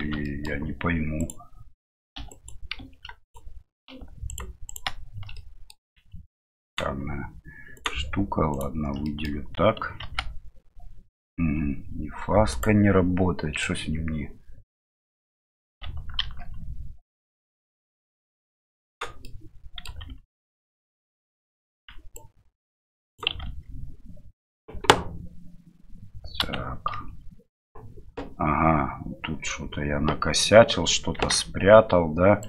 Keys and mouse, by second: 0.2 middle click, 1.2 right click, 4.3 ctrl+right click, 5.4 middle click, 9.0 middle click, 13.7-15.6 middle drag, 17.1 middle click, 17.7-19.0 right drag, 19.3 middle click, 20.0 ctrl+z, 20.5 ctrl+z, 22.1-23.7 right drag, 23.4 ctrl+z, 26.4 a, 26.9 l, 31.1 g.